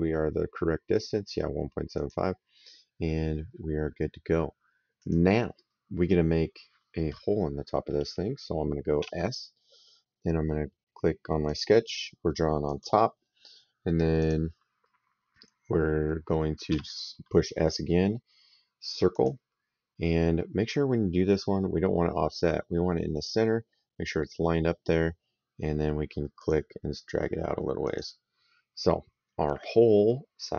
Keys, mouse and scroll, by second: 1.8 click, 4.8 click, 8.9 s, 11.3 click, 12.5 click, 14.0 click, 15.2 middle click, 16.5 s, 19.0 click, 26.2 click, 27.7 click.